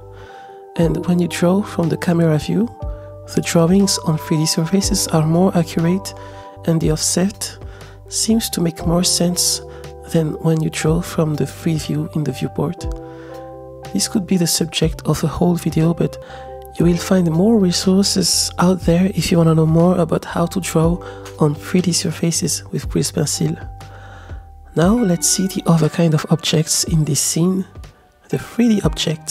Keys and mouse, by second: 1.9 KP_0, 2.8 click, 3.6 click, 6.1-7.1 shift+middle drag, 8.9 click, 10.2-12.6 middle drag, 13.4 middle click, 14.2-16.3 middle drag, 17.5-18.7 middle drag, 18.7 click, 20.8 ctrl+z, 21.8 z, 22.9 KP_0, 25.1 click, 26.0 middle click, 28.0 middle click.